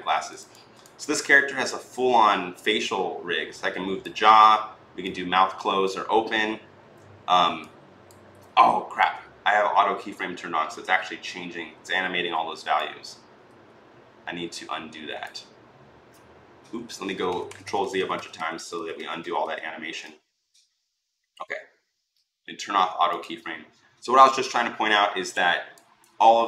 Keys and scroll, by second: 16.9 ctrl+z, 17.1 ctrl+z, 17.2 ctrl+z, 17.4 ctrl+z, 17.6 ctrl+z, 17.7 ctrl+z.